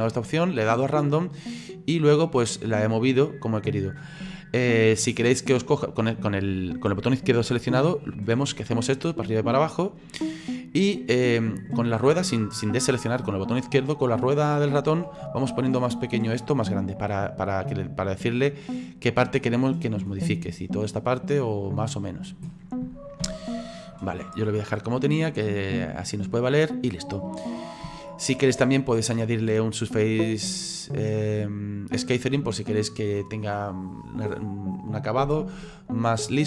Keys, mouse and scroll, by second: 2.2 click, 23.3 ctrl+z, 25.2 click, 26.3-27.4 middle drag, 27.4-27.9 scroll up 2, 27.9-31.5 shift+middle drag, 36.2 click.